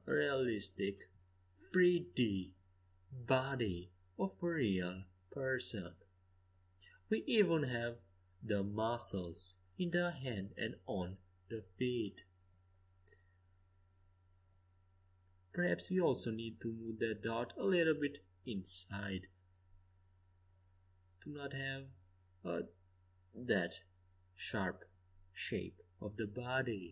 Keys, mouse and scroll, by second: 5.9 z, 7.5 middle click, 11.3 a, 11.8 a, 12.2 a, 13.4 c, 16.0-18.0 drag, 16.5 c, 18.0 g, 19.9 a, 21.0-23.1 middle drag, 24.4-26.9 right drag.